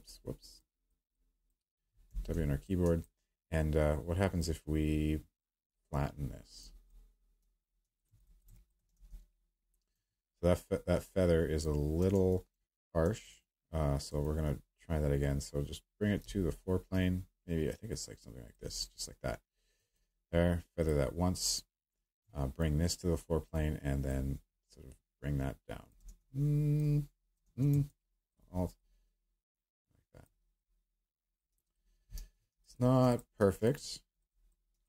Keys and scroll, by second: 2.1 w, 8.9 ctrl+z, 12.1 ctrl+z, 26.0 ctrl+z, 27.4 ctrl+z, 32.1 q.